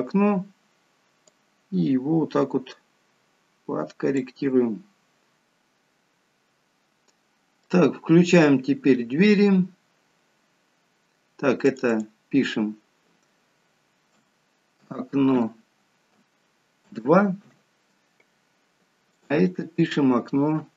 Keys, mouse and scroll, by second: 1.2 click, 4.4-5.2 scroll down 3, 5.2 scroll down 2, 5.3 middle click, 5.3-5.8 scroll up 5, 11.6 click, 11.8 click, 19.1 click, 19.3 click.